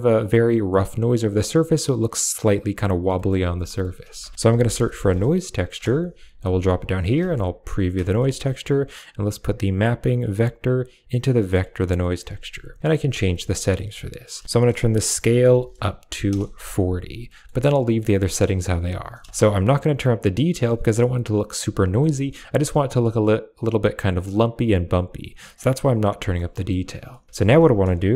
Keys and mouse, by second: 3.0 middle click, 3.5 middle click, 4.1 shift+a, 5.6 shift+a, 6.8 click, 7.5 ctrl+shift+click, 8.0 middle click, 10.2-11.5 drag, 13.2 middle click, 14.1-16.2 drag, 17.1 middle click, 17.7 middle click, 18.0 middle click, 18.5 click, 19.1 shift+click, 19.8 click, 21.8 shift+click, 26.0 middle click, 26.4 middle click, 26.9 middle click, 27.3 shift+a.